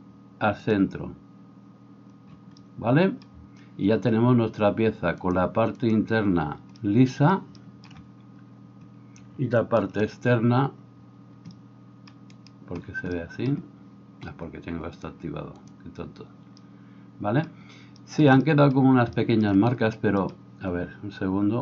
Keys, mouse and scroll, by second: 5.4-15.7 drag, 12.4 middle click, 12.4 right click, 15.7-21.6 middle drag.